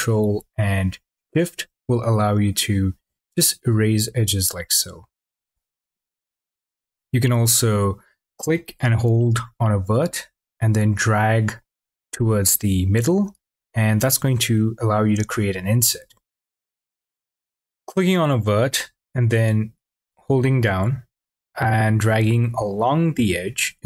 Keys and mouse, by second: 7.8 click.